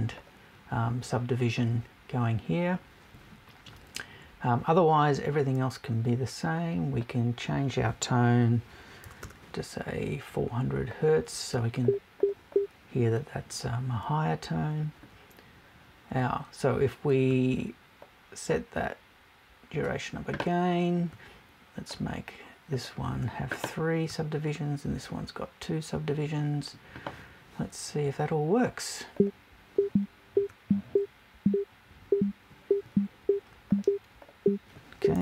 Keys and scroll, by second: 9.0 BackSpace, 35.1 BackSpace.